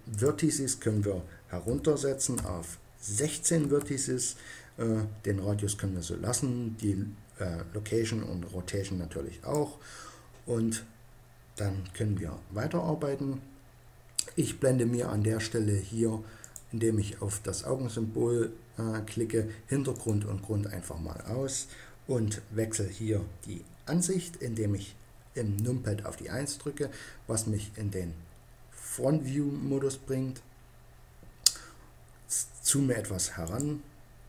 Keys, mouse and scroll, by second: 6.7-7.9 drag, 8.5-16.3 middle drag, 18.1-19.8 middle drag, 21.6-23.6 middle drag, 25.7 KP_1, 28.9 click, 33.3 click.